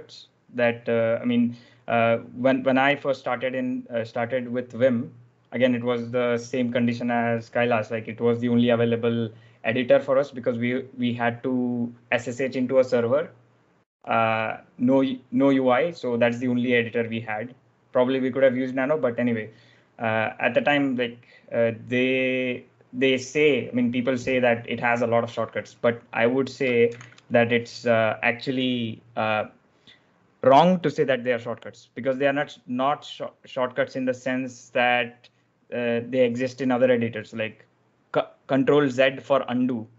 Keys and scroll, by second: 27.0 ctrl+alt+shift+super+l.